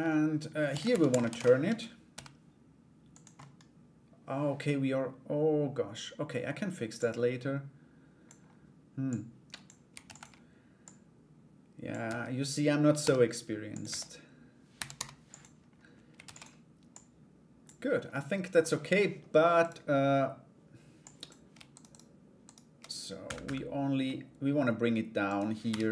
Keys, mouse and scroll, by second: 0.3 shift+d, 1.7 g, 2.9-5.8 middle drag, 6.5-7.8 drag, 8.7 click, 9.6 shift+d, 10.4-11.5 drag, 11.6 Tab, 12.6 g, 13.4 Tab, 14.3 r, 15.8 shift+d, 16.5 click, 17.7 middle click, 19.2 right click, 20.6 click, 21.3 shift+right click, 21.5 shift+right click, 22.0 shift+right click, 23.0 /, 23.6 middle click, 24.9 right click, 25.2 KP_1.